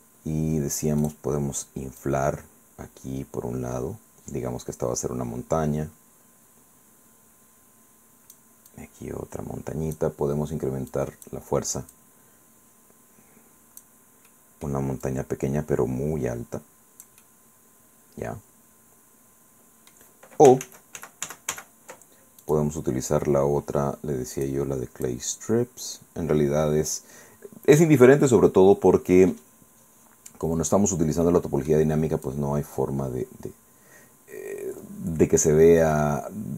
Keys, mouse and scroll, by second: 1.1 click, 2.1-8.5 drag, 8.7-10.2 drag, 10.9 click, 11.9-14.1 drag, 14.3 middle click, 15.1-17.3 drag, 17.3-19.8 scroll down 2, 20.0 scroll up 2, 20.7 ctrl+z, 22.5 click, 24.4 click, 25.1-30.9 drag, 30.9-31.7 scroll down 1, 31.7-32.3 scroll up 1, 32.3-35.7 drag, 35.7 scroll down 2, 35.9-36.5 middle drag.